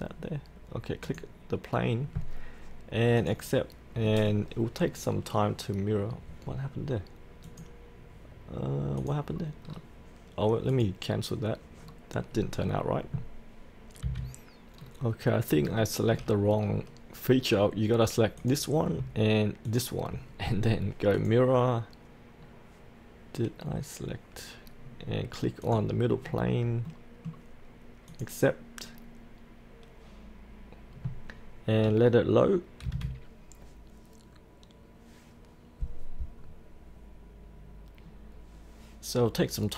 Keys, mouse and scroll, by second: 9.3-9.6 scroll up 1, 9.6-10.7 scroll down 1, 10.7 click, 11.1 click, 11.8-14.0 scroll up 1, 14.0 F8, 14.8-15.3 scroll down 1, 15.3-15.6 scroll up 1, 15.8 shift+middle click, 15.9 shift+middle click, 15.9 scroll, 16.6-18.4 scroll down 1, 18.4 click, 19.6 ctrl+click, 21.2 click, 22.4-25.6 scroll down 1, 25.6 click, 26.2-26.9 scroll up 1, 26.9 middle click, 28.1 click, 32.8 F8.